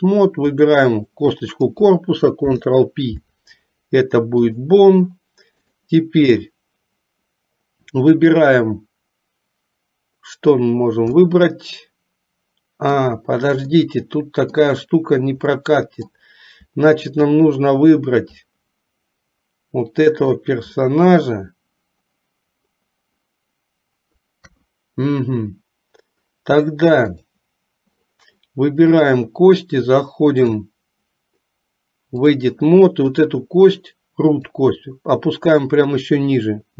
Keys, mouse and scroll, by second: 0.6 click, 2.5 ctrl+p, 5.9 click, 11.2-13.1 middle drag, 14.0 middle click, 15.6 middle click, 17.2 shift+click, 18.6-20.5 middle drag, 21.0 middle click, 24.6 KP_3, 27.1 click, 29.1 click, 30.5-32.5 drag, 34.6-36.7 drag.